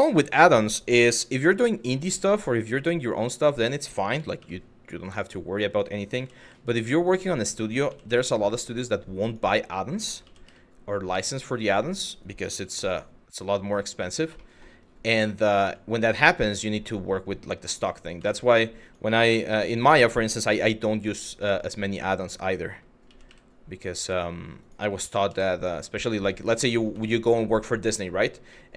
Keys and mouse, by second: 0.4 click, 0.7 g, 0.9 y, 1.9 click, 4.8 click, 5.3 click, 5.8 g, 6.6 click, 7.5 g, 8.9 click, 9.6 click, 11.2 click, 13.6 click, 14.1 shift+middle click, 15.2 middle click, 15.8 middle click, 16.5 middle click, 17.4 middle click, 17.9 shift+middle click, 18.5 click, 18.8 g, 19.1 y, 20.7 click, 21.1 middle click, 22.7 g, 22.9 y, 23.7 click, 24.3 click, 24.6 g, 26.4 click, 26.7 shift+middle click, 27.1 middle click, 27.5 middle click, 28.3 middle click.